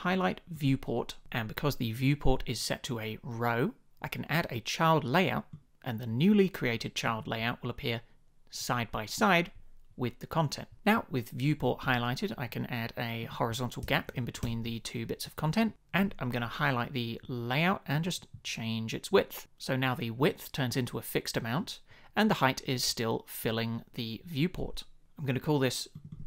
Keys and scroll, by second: 13.8 shift+Up, 14.4 Return.